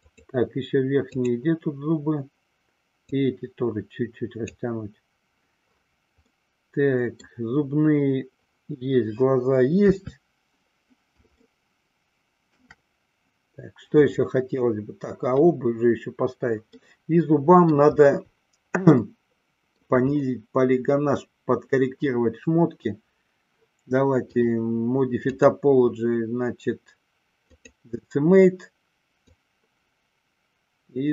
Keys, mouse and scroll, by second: 0.1 click, 1.2 click, 3.1-4.7 drag, 6.4-7.5 middle drag, 9.9 KP_3, 11.5-12.0 shift+middle drag, 12.3 shift+middle click, 16.7-17.9 middle drag, 19.0-19.9 shift+middle drag, 25.4-27.8 drag, 29.3-31.1 drag.